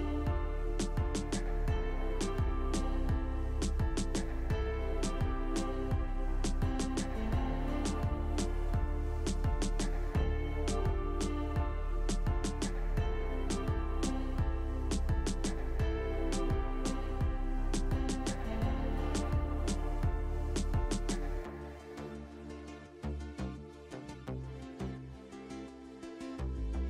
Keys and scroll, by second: 0.8 alt+w, 2.2 alt+w, 3.1 alt+w, 4.7 alt+w, 5.2 alt+w, 6.8 alt+w, 9.4 alt+w, 11.2 alt+w, 11.9 alt+w, 12.9 alt+w, 13.6 alt+w, 14.9 alt+w, 15.4 alt+w, 17.3 alt+w, 19.3 alt+w, 20.3 alt+w, 21.4 alt+w, 22.3 alt+w, 24.4 alt+w.